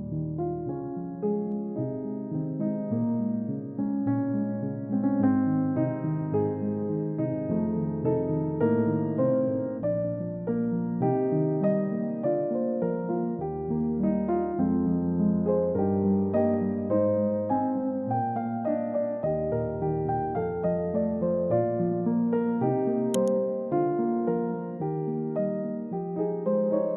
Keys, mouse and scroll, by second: 0.2 scroll down 1, 4.7 right click, 8.9 double click, 20.5 double click, 21.9 scroll up 1, 23.5 double click, 24.5-25.8 scroll up 1.